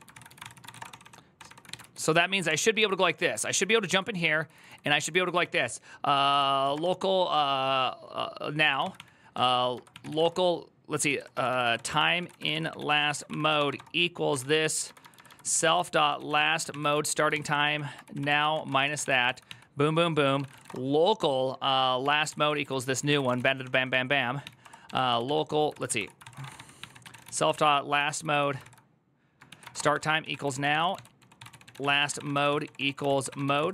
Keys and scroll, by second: 0.0-1.5 typing, 1.2 ctrl+d, 1.6 ctrl+u, 2.2 ctrl+d, 2.6 ctrl+u, 2.9-6.9 typing, 8.4 Tab, 8.5-20.9 typing, 21.8 Tab, 22.1 ctrl+c, 22.3 ctrl+c, 22.5 ctrl+c, 22.7-33.7 typing.